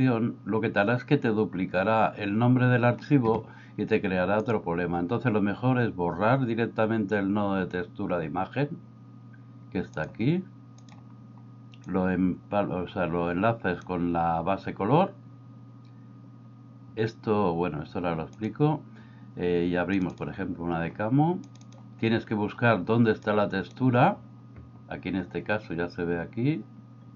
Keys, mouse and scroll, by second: 4.5-11.0 drag, 11.9-13.8 drag, 18.3 click, 23.5 click.